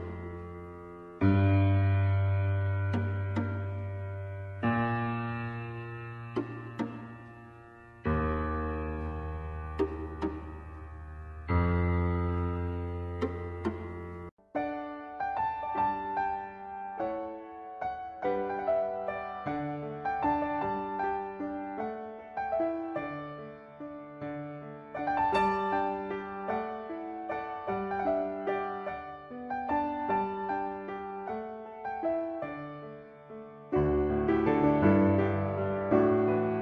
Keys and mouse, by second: 1.7 shift+middle click, 11.6-12.8 middle drag, 13.4 middle click, 14.6 shift+middle click, 17.4 middle click, 18.9 click, 21.8 h, 25.6 middle click, 27.0 click, 28.0 click, 28.6-30.6 drag, 31.3-33.7 drag, 34.1 click, 34.7-36.6 drag.